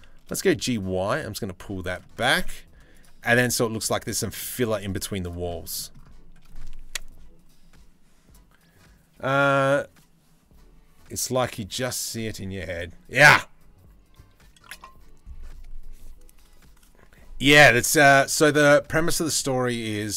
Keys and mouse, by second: 2.0 z, 3.1 z, 3.7 middle click, 4.2 Tab, 4.6 z, 5.1-5.6 middle drag, 7.1 z, 18.6 middle click, 19.8 middle click.